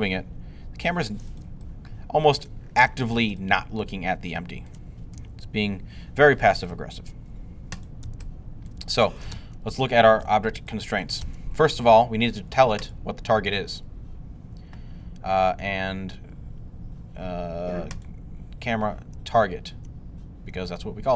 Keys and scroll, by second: 5.0 g, 7.9 g.